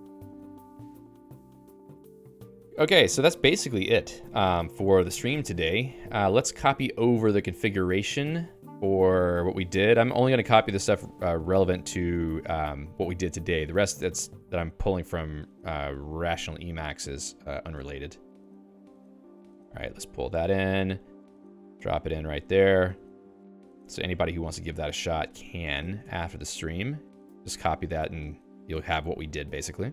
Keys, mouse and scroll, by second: 8.1 Page_Up, 9.5 Up, 11.3 Down, 11.5 shift+v, 11.7 Down, 12.5 Down, 19.3 y.